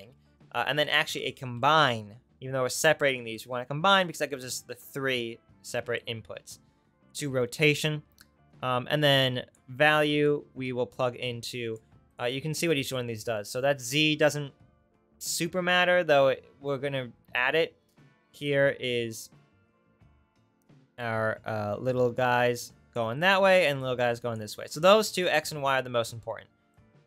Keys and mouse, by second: 0.0 shift+a, 0.2-6.0 right drag, 12.2 right click, 14.3 ctrl+z, 23.2 ctrl+z, 24.7 ctrl+z.